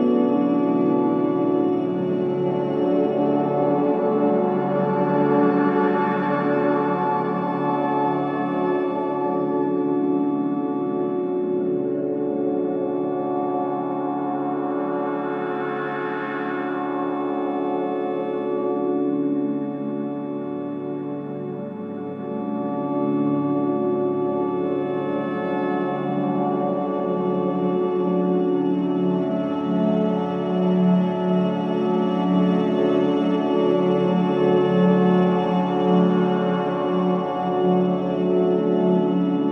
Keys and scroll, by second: 0.4 c, 8.1 ctrl+shift+z, 8.6 space, 21.4 ctrl+alt+e, 24.1 Return.